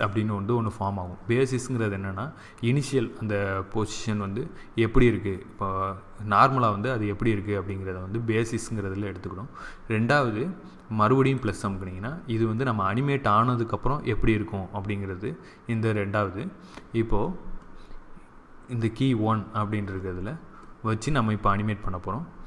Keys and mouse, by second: 11.1-13.1 drag.